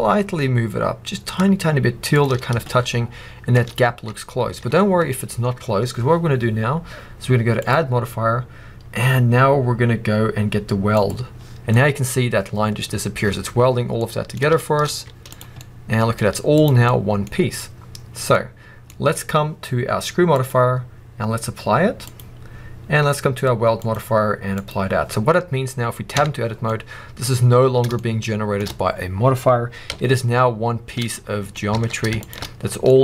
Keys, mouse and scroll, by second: 2.1 shift+click, 2.3 scroll down 2, 2.6 shift+middle click, 4.5 Tab, 4.5-7.5 middle drag, 5.1-7.5 scroll down 1, 7.5-11.6 drag, 11.6-20.2 middle drag, 12.0-12.7 scroll up 2, 12.7-13.2 scroll up 1, 13.2-13.9 scroll down 2, 14.8 z, 16.1 z, 17.2 scroll up 2, 20.2-26.6 drag, 26.0 Tab, 26.4 scroll down 2, 26.6-27.2 middle drag, 27.2 scroll up 2, 27.8-29.8 shift+middle drag, 29.8 a, 31.0 middle click, 31.6 alt+a, 32.1 alt+shift+click, 32.4 scroll down 2, 32.8-33.0 middle drag.